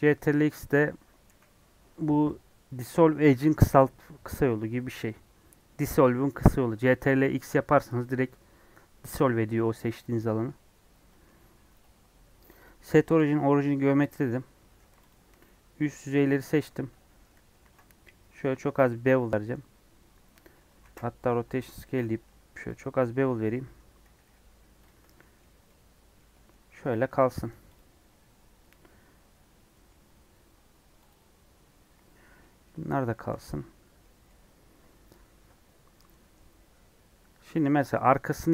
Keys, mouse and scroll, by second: 5.0-10.0 middle drag, 10.0 scroll down 2, 10.2 middle click, 10.4 scroll up 1, 10.8 scroll down 1, 11.0 middle click, 11.4 Tab, 13.1 right click, 13.7 middle click, 14.0-14.6 scroll up 2, 14.2 Tab, 15.6 scroll up 2, 15.7 middle click, 17.5 ctrl+b, 20.6 Tab, 21.3 ctrl+a, 21.3 Tab, 21.8 ctrl+b, 22.9 Tab, 23.3 Tab, 23.5 Tab, 24.2 /, 24.8 click, 25.0 scroll down 3, 25.2 middle click, 25.6 scroll down 1, 25.6-27.0 middle drag, 27.0-27.4 scroll up 5, 27.7 click, 27.9 scroll up 4, 28.3 Tab, 29.1 Tab, 29.3 scroll down 4, 29.7 middle click, 30.1 Tab, 31.1 click, 31.6 Tab, 32.0 Tab, 32.2 scroll down 2, 32.4 middle click, 32.8 scroll down 1, 33.1-38.5 shift+middle drag.